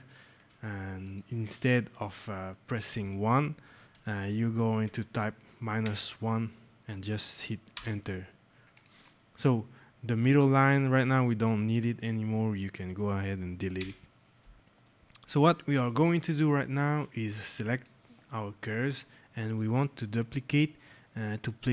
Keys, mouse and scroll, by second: 0.9 alt+click, 4.7 click, 7.2 -, 7.6 Return, 8.7 click, 13.7 Delete, 14.5 click, 17.1 click.